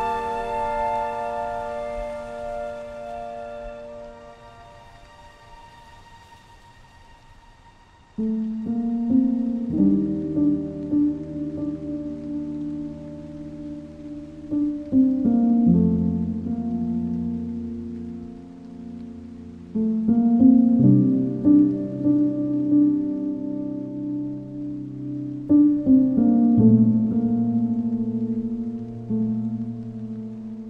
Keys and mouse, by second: 8.2 middle drag, 18.0 click, 18.3 Tab, 19.9-21.3 ctrl+KP_Add, 21.6 c, 22.1 Escape, 22.6 x, 27.9 KP_3.